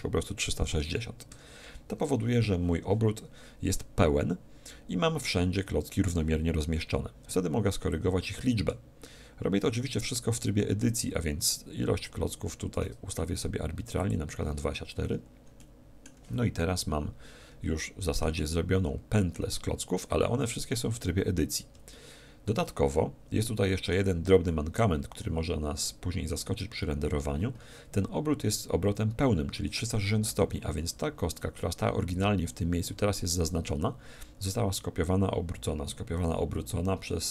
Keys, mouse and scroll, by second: 7.8-9.6 drag, 14.0-15.7 drag, 15.0-17.5 middle drag, 17.8-20.4 middle drag, 21.9-28.8 middle drag.